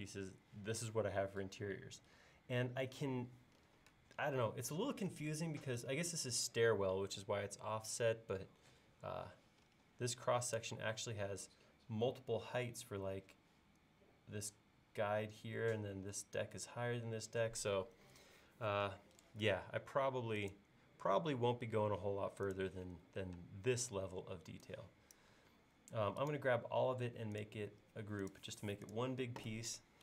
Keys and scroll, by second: 23.4 space.